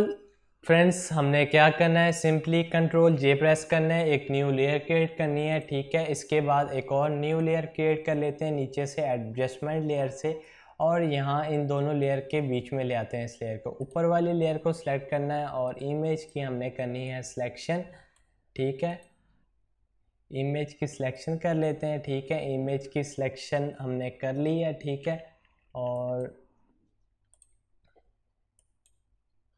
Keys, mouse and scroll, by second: 2.4 ctrl+z, 5.3 click, 10.2-13.6 drag, 15.4 right click, 16.0-18.7 drag, 24.8-25.5 typing.